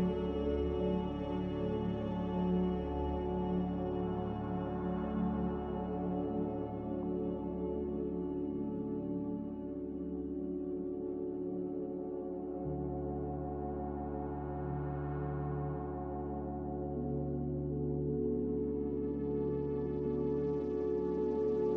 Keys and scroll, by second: 2.6 b, 6.2 5, 6.2 0, 6.6 Return, 10.4 Delete, 11.5 g, 13.7 Escape, 13.7 z, 16.7 Return, 16.7 5, 16.7 0, 19.3 n, 19.7 a.